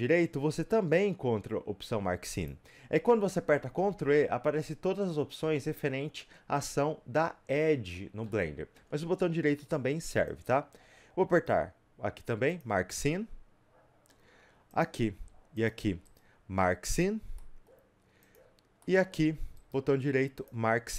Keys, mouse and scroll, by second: 2.4 right click, 3.1-10.4 middle drag, 10.4 click, 12.6 right click, 13.0-14.8 middle drag, 14.8 click, 17.0 right click, 17.2 scroll up 2, 17.4 middle click, 18.3 click, 18.8-20.4 middle drag, 20.4 right click.